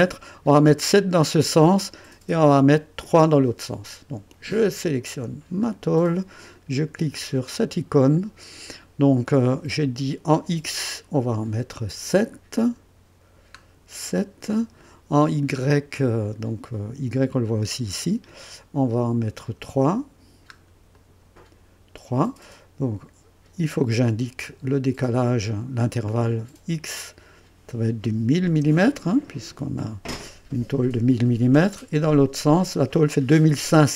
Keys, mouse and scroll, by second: 5.6 click, 7.1 click, 12.3-12.8 scroll up 2, 13.3 scroll up 2, 20.4 scroll up 2, 20.9 click, 26.9 click, 28.4 0.